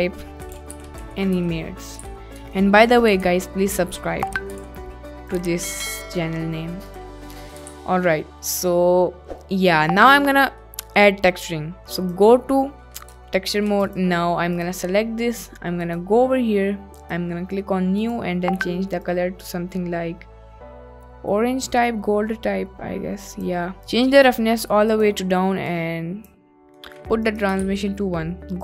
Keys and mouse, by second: 0.0-2.0 typing, 2.4 Tab, 3.2 s, 4.3 ctrl+click, 4.6 g, 4.7 z, 5.4 click, 7.0 click, 7.3 middle click, 7.8 ctrl+s, 8.0 middle drag, 8.7-10.1 middle drag, 10.7 middle click, 12.0 click, 13.5 shift+middle click, 13.9 click, 15.8 click, 16.9-17.3 drag, 18.1 drag, 23.9 click, 25.0 click, 25.7 click, 26.9 middle click, 27.4 click, 27.7 ctrl+s.